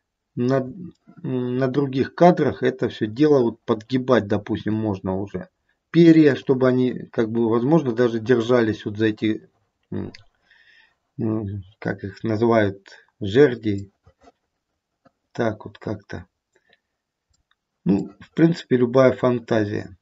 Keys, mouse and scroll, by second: 0.8 middle click, 2.7 middle click, 4.5 r, 11.4-12.5 scroll down 1, 13.9 middle click, 14.4 middle click, 14.9 middle click, 18.0 middle click.